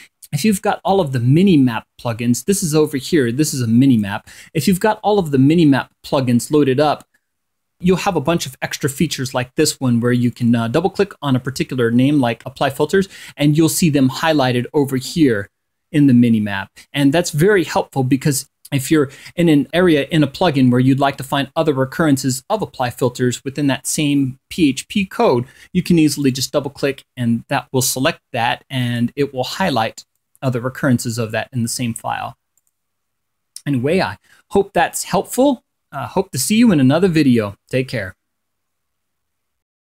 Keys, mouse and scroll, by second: 3.3-4.8 drag, 6.2-7.0 scroll up 4, 7.2-7.5 scroll up 2, 9.9 click, 11.5 scroll down 1, 13.1 scroll down 2, 18.4 click, 19.6-20.2 scroll down 3, 20.3-20.8 scroll up 2, 25.5 click, 26.7-27.1 scroll up 2, 27.5-29.8 scroll up 8, 30.3-30.6 scroll up 2, 31.0-31.4 scroll down 2, 37.0 click.